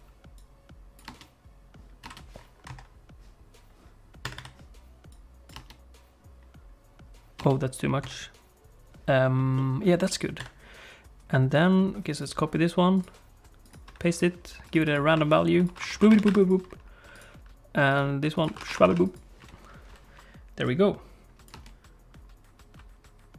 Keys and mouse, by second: 0.4 click, 2.1 space, 2.8 click, 4.2 click, 5.2 click, 7.5 space, 8.0 shift+click, 9.6 middle click, 10.5 click, 13.0 click, 14.2 click, 15.0 1, 15.1 2, 15.8 click, 17.1 click, 18.5 click, 20.7-21.7 drag, 21.6 space.